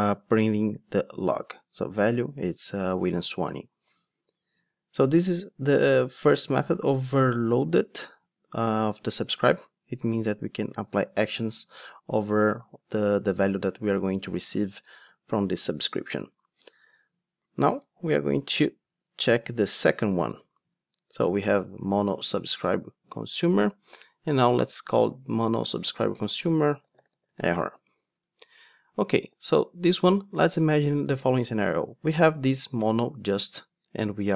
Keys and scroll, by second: 17.7 super+c, 19.3 super+c, 20.3 super+v.